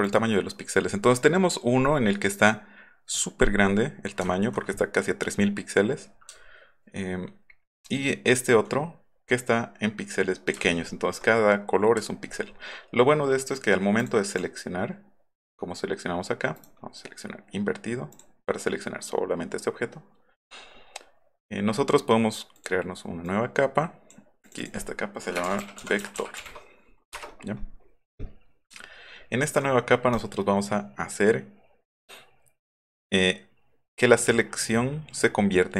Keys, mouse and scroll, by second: 0.0 click, 4.3 alt+scroll up 1, 6.4 alt+scroll up 1, 6.9 alt+middle click, 7.7 alt+middle click, 8.0 alt+middle click, 8.3 alt+middle click, 10.6 alt+scroll up 2, 14.0 click, 14.3 click, 16.6 right click, 18.2 click, 22.6 click, 23.3 click, 24.4 click, 24.6 click, 25.2-26.9 typing, 28.8-29.4 alt+scroll up 3, 29.1 alt+middle click, 29.3 alt+middle click, 30.1 right click.